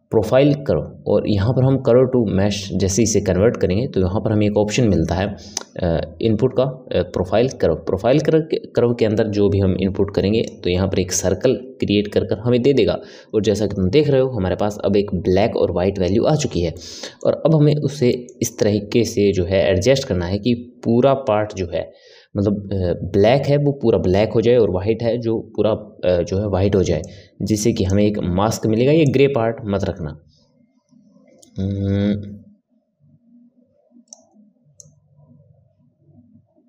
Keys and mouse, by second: 16.7-23.5 middle drag, 27.0-32.1 drag, 34.8-36.6 drag.